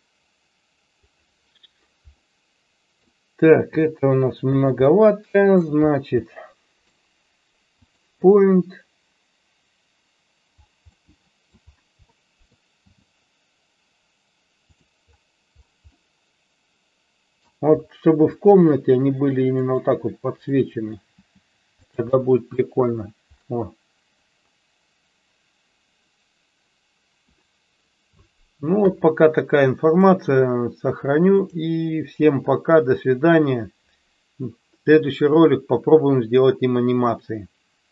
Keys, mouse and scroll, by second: 2.3-3.1 middle drag, 3.7 r, 4.6 click, 5.0-5.6 middle drag, 6.3-7.0 middle drag, 7.8 click, 11.0-11.6 middle drag, 12.1 middle click, 12.9 g, 16.1-17.5 middle drag, 18.2 g, 19.7 click, 20.5-21.1 middle drag, 21.9 click, 22.2-22.6 middle drag, 22.7 KP_1, 30.1-31.8 drag.